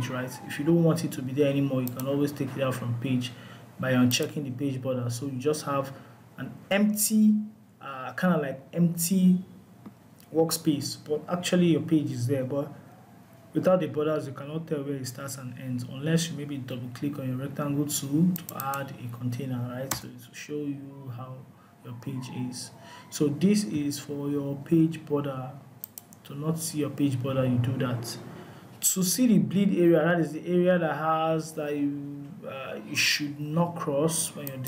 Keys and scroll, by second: 23.2 Delete.